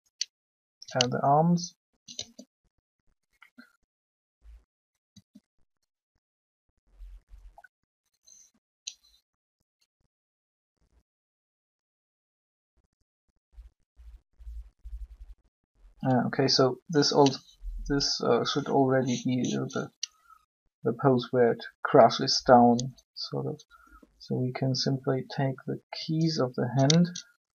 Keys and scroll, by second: 2.1 shift+r, 5.1 r.